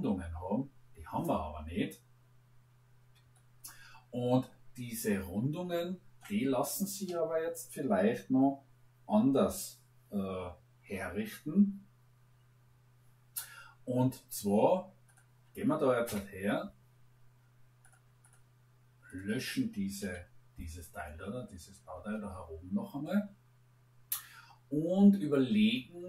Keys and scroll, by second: 16.0 Delete, 19.9 Delete.